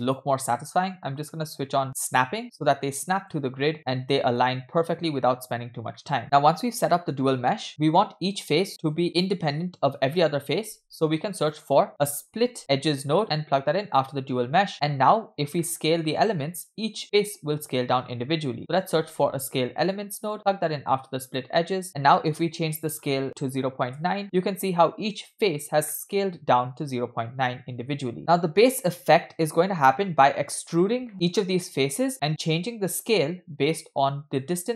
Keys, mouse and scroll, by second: 1.5 click, 2.7 click, 3.7-4.2 drag, 4.4-4.9 drag, 5.7-6.0 scroll down 2, 6.0 middle click, 6.5-6.9 scroll up 2, 6.9 middle click, 7.2-8.3 scroll up 6, 10.7 shift+a, 14.7 drag, 15.2-15.6 scroll down 1, 15.6 middle click, 16.1-16.6 scroll down 2, 16.6 click, 17.9 shift+a, 21.8 click, 22.3 click, 22.7-24.1 drag, 25.9-27.2 middle drag, 27.3-28.1 scroll down 1, 28.2-29.1 drag, 29.6-30.6 scroll up 4, 30.8-31.1 scroll down 2, 31.1 middle click, 31.7-32.1 middle drag, 34.5-34.7 scroll down 2.